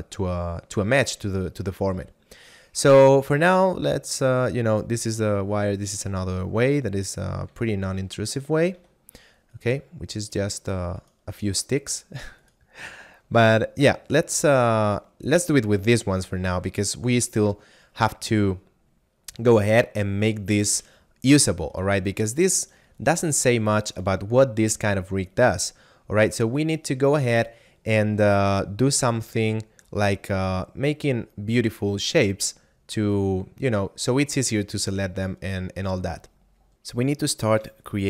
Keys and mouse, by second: 4.1 click, 6.7 right click, 7.4 r, 8.3 right click, 8.8 Tab, 9.6 right click, 13.5 click, 16.1 a, 19.9 middle click, 21.0 shift+middle click, 22.3 right click, 30.0 right click, 32.9 right click.